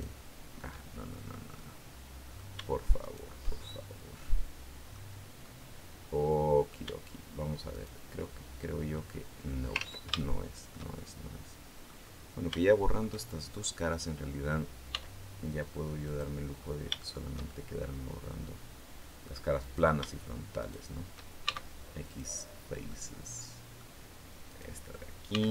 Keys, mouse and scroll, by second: 0.5 shift+middle click, 1.3 shift+middle click, 2.8 shift+right click, 3.3-4.9 shift+middle drag, 5.2-6.7 middle drag, 7.5 shift+right click, 8.3 shift+scroll down 1, 8.7-9.1 scroll up 1, 9.5 ctrl+z, 10.0 ctrl+shift+middle click, 10.7-11.9 shift+middle drag, 11.9-12.3 scroll down 3, 12.3 shift+middle click, 13.0-13.3 shift+scroll down 2, 13.3 shift+middle click, 14.7 x, 15.9 click, 16.5-16.8 scroll up 1, 16.8-19.2 shift+middle drag, 19.4 right click, 20.4 shift+right click, 21.3 shift+x, 21.9 click, 22.7-23.7 middle drag, 24.3 right click, 25.1 x, 25.4 click.